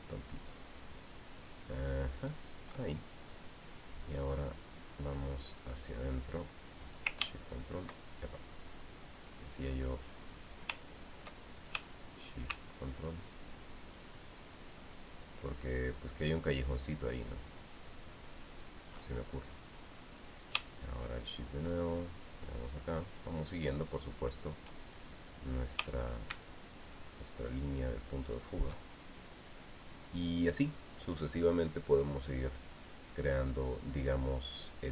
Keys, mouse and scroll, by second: 3.0 ctrl+shift+click, 7.6 ctrl+click, 12.4 shift+click, 19.3 ctrl+shift+click, 21.2 shift+click, 25.0 shift+click, 26.4 shift+click, 29.1 ctrl+shift+click.